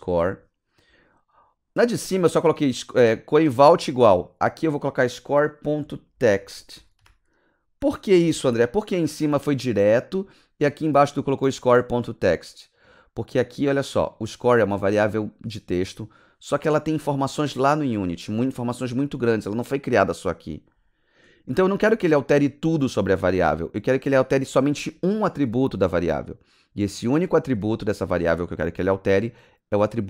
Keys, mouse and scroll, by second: 5.5-8.5 typing, 12.4 click, 13.3 click, 13.5 click, 21.5 click.